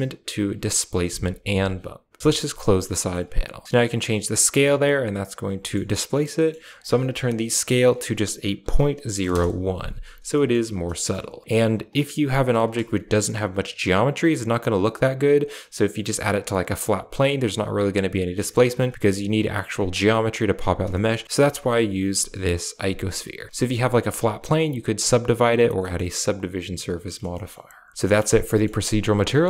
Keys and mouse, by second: 2.2 click, 2.9 middle click, 3.5-5.1 shift+drag, 5.5 middle click, 7.7-9.2 drag, 10.3 shift+middle click, 10.5 a, 11.0 shift+middle click, 11.4 click, 11.8 right drag, 12.7 Tab, 17.4 Tab, 18.5 shift+middle click, 18.7 Tab, 20.7 Tab, 21.0 shift+middle click, 21.2 Tab, 23.1 Tab, 25.7 middle drag, 26.2 click, 27.3 shift+middle click, 27.9 middle click, 28.4 middle click, 29.2 middle click.